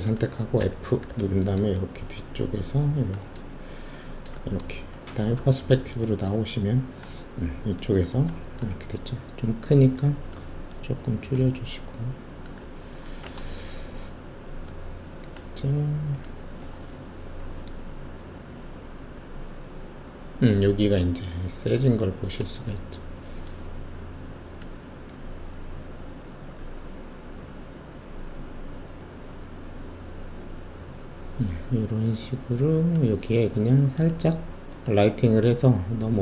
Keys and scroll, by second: 0.6 alt+f, 5.3 alt+shift+q, 13.6 alt+shift+F1.